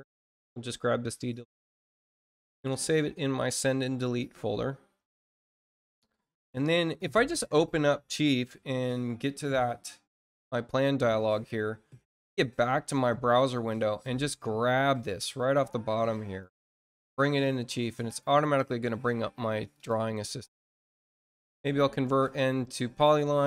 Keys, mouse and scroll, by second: 0.0 click, 3.3 click, 6.9 click, 9.4 click, 13.6-17.4 drag, 19.6 click, 21.3 click, 21.8 click.